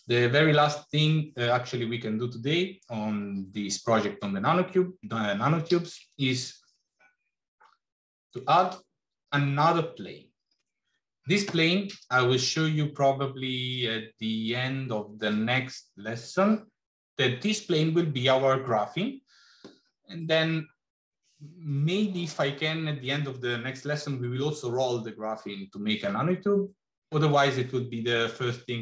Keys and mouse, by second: 5.8 shift+a.